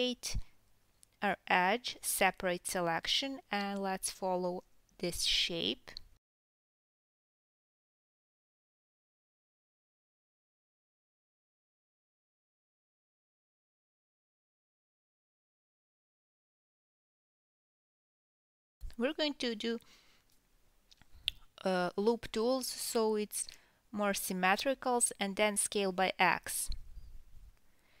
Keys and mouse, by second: 0.0-0.4 drag, 0.2 p, 0.6 Tab, 2.4-3.7 ctrl+right drag, 3.0 g, 3.6 KP_1, 3.9-27.6 ctrl+right drag, 4.0 Tab, 4.4 a, 4.7 g, 5.3-6.3 shift+drag, 5.3-8.5 shift+middle drag, 5.8 r, 6.4 g, 7.0 Tab, 7.3 1, 7.5-7.8 drag, 8.0 Tab, 8.0 click, 8.2 Tab, 8.4 click, 8.7 click, 8.7 middle click, 8.9 Tab, 9.2 1, 9.5 KP_3, 9.8 g, 10.9 KP_1, 11.8 e, 13.0-17.0 typing, 18.1 f, 19.2 f, 19.8 g, 20.2 click, 20.4 g, 20.7 a, 22.1 s, 22.9 s, 24.8 e, 26.1 s, 26.5 e, 27.6-28.0 drag, 27.6 KP_7.